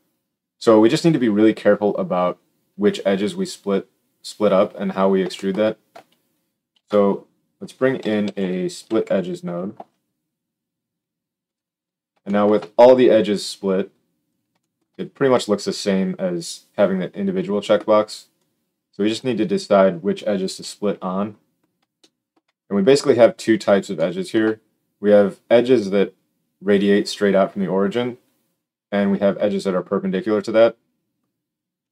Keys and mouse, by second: 6.6 shift+a, 8.2 s, 13.2-31.9 drag, 20.5 KP_7.